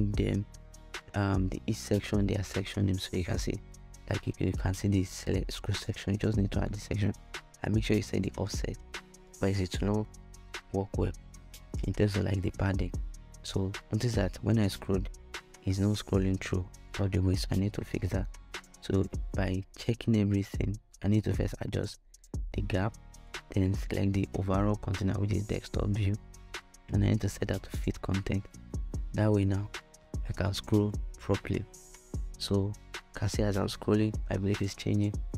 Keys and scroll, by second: 19.6 Right, 20.2 0, 20.4 Return.